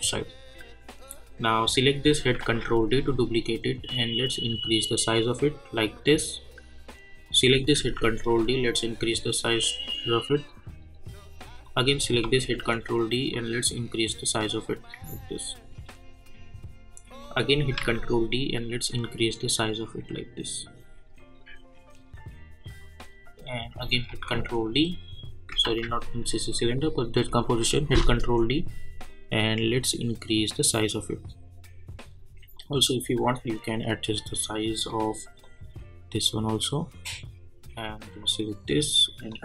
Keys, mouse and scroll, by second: 1.5 click, 2.4 ctrl+d, 4.2-7.2 drag, 7.8 ctrl+d, 9.6-11.6 drag, 12.2 ctrl+d, 13.3-17.3 drag, 17.7 ctrl+d, 19.0-23.6 drag, 24.1 ctrl+d, 25.6 ctrl+z, 26.8 click, 27.7 ctrl+d, 29.1-39.4 drag.